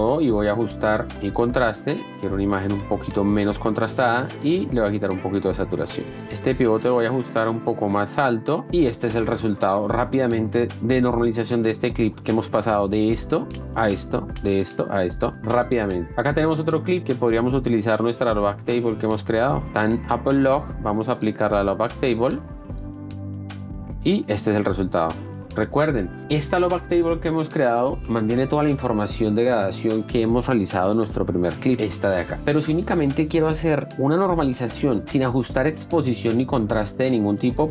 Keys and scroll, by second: 12.0 shift+d, 15.4 space, 24.8 shift+d, 29.8 F1.